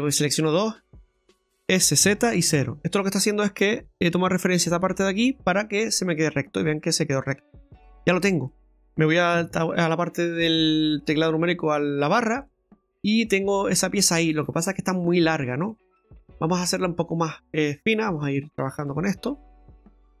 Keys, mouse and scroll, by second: 0.2 shift+right click, 1.2 s, 6.5 middle click, 7.8-8.2 scroll up 1, 8.4 middle click, 9.3 KP_Divide, 12.1 scroll up 2, 12.7 middle click, 15.3 scroll up 2, 15.7 middle click, 16.8 shift+middle click, 18.8 click, 19.2 middle click, 19.9 ctrl+z, 19.9 middle click, 19.9 scroll down 1.